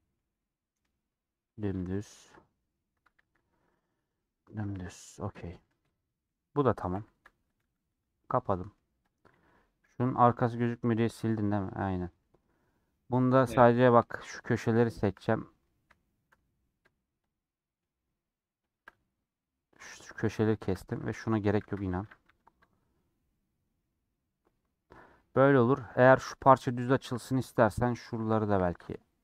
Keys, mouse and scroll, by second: 0.9-1.4 scroll down 3, 1.4 middle click, 1.8 Tab, 2.0 middle click, 3.0 Tab, 5.7-6.9 middle drag, 6.9 /, 7.8-9.1 middle drag, 9.1 click, 9.9 /, 10.0 middle click, 10.5 Tab, 10.6-12.5 middle drag, 12.5-12.8 scroll down 1, 12.8 scroll up 1, 12.9 middle click, 13.1 2, 13.8 scroll down 1, 14.0 shift+middle click, 14.7 shift+click, 15.2-17.2 middle drag, 17.2 shift+click, 17.5-18.7 shift+middle drag, 18.7 shift+click, 19.3-20.8 middle drag, 20.8 2, 21.6 ctrl+x, 24.4-27.2 middle drag, 27.2 2.